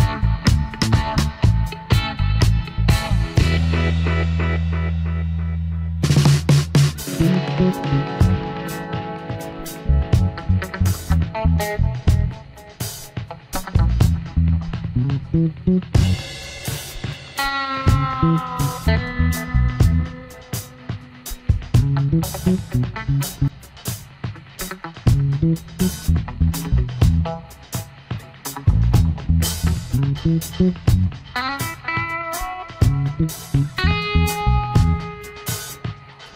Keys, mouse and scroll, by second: 19.2 alt+click, 20.7 alt+shift+click, 21.7 space, 26.0 Caps_Lock, 28.1 space, 31.2 alt+scroll down 1, 31.3 space, 32.5 alt+scroll up 1, 32.9 space, 35.1 space.